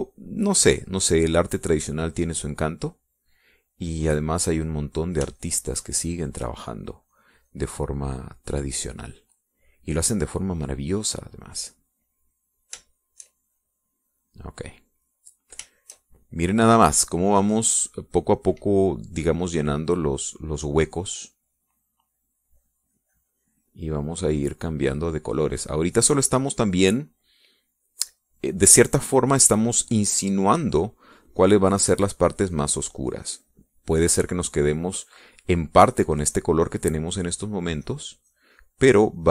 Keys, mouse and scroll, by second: 6.7 shift+click, 7.5-9.2 shift+drag, 12.9 click, 13.3 click, 14.8-16.9 shift+drag, 17.0 shift+click, 17.9-19.0 middle drag, 20.7 click, 21.7 click, 37.5-39.1 drag.